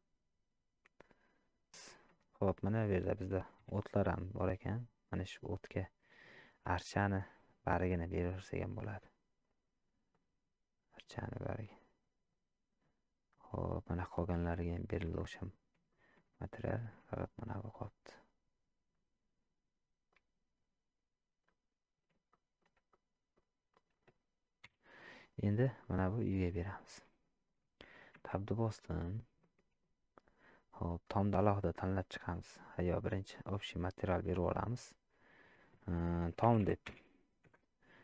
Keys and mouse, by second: 1.9 shift+middle drag, 5.1 middle click, 6.3-7.9 drag, 10.9 click, 14.7 shift+middle drag, 15.2 middle click, 15.9 shift+drag, 16.6 shift+middle drag, 17.8-18.9 drag, 20.1-21.4 drag, 22.3 shift+middle drag, 22.9-23.4 middle drag, 23.8 click, 25.8 middle drag, 26.6 shift+middle click, 28.5 middle click, 29.6 shift+middle click, 31.2 click, 33.2-37.5 drag.